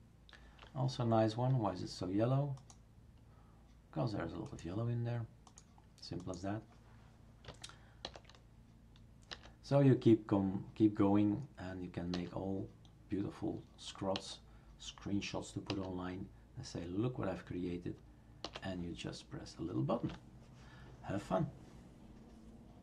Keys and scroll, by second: 8.0 alt+shift+n, 9.3 alt+shift+n, 12.1 alt+shift+n, 14.1 alt+shift+n, 15.7 alt+shift+n, 18.4 alt+shift+n.